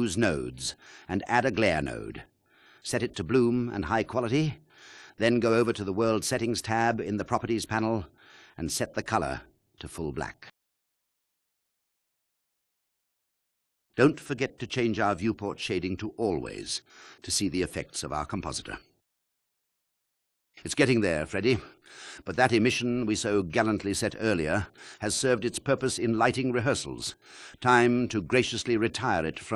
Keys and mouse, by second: 0.3 click, 0.6 click, 1.2 shift+a, 2.5-3.5 drag, 4.0-5.2 drag, 6.3 KP_1, 6.6 KP_0, 14.2-17.4 drag, 19.6 KP_0, 19.9 click, 28.8-29.5 drag.